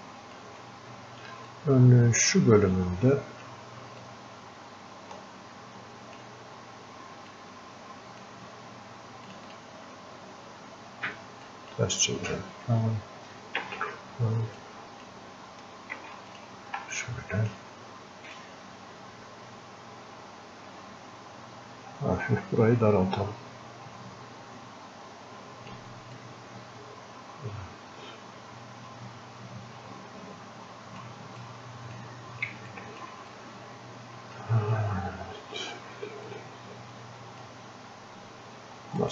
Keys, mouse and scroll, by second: 0.0 shift+click, 1.8-3.7 ctrl+drag, 4.4-6.2 ctrl+drag, 7.3-9.3 ctrl+drag, 13.6 ctrl+z, 14.6-16.0 ctrl+drag, 16.0 ctrl+z, 16.3 ctrl+click, 16.9-18.3 drag, 22.3-26.2 drag, 26.2-31.5 drag, 31.5-32.8 drag, 32.8 alt+click, 33.4-36.3 drag, 36.3-39.1 drag.